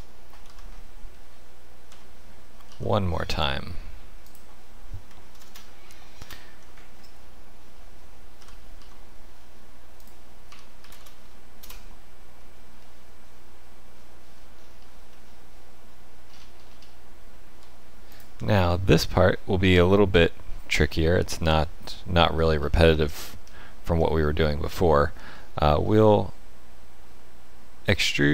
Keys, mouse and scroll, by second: 1.1 middle click, 1.9 e, 5.3 ctrl+KP_Add, 5.4 ctrl+KP_Add, 6.2 ctrl+KP_Add, 7.0 middle click, 8.4 g, 10.4 1, 10.8 a, 10.9 space, 12.8 middle click, 14.3-16.2 scroll down 8, 16.2-16.9 scroll up 9, 18.1 alt+click, 18.7 middle click, 20.5-21.1 scroll down 4, 21.1 middle click, 22.6-23.3 scroll up 2, 23.3 scroll up 2, 23.5 shift+middle click, 24.2 middle click, 25.3 middle click, 26.8 shift+middle click, 27.9 e.